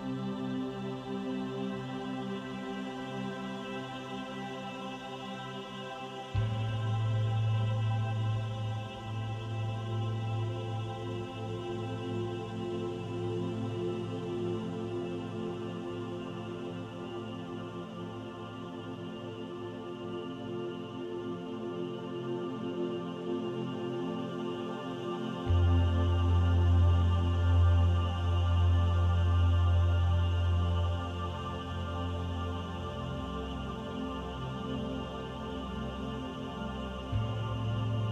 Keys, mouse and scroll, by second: 0.1 click, 1.5 click, 2.5 middle click, 3.7 shift+middle click, 4.1 middle click, 4.7-5.0 scroll down 4, 5.0 middle click, 6.2 KP_7, 7.9 click, 9.1 click, 11.4 shift+d, 12.3 click, 16.2 middle click, 17.3-17.9 scroll up 4, 18.5 middle click, 20.2 middle click, 20.3 shift+middle click, 21.7-22.2 scroll down 3, 22.2 shift+middle click, 23.0 middle click, 23.7 scroll up 1, 25.0 r, 28.2 click, 29.3 r, 31.6-32.2 scroll down 1, 32.4 shift+middle click, 33.0 middle click, 33.8 middle click, 34.0 shift+middle click, 35.8 middle click, 37.1 shift+a.